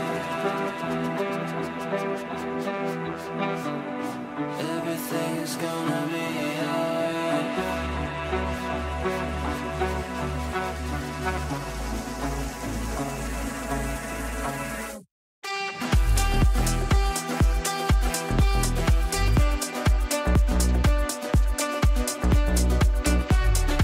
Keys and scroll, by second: 1.5 5, 1.7 Return, 15.1 ctrl+z.